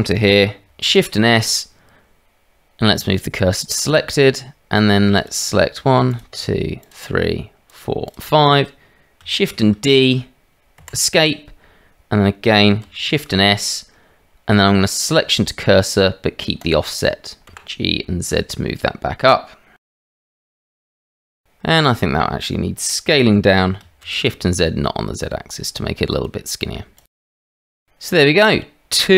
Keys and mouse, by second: 0.9 shift+s, 5.2 click, 6.1 shift+middle click, 6.8 shift+middle click, 9.5 shift+d, 12.8 shift+s, 17.5 g, 21.7 click, 23.1 s, 27.7-28.1 drag, 28.1-28.9 middle drag.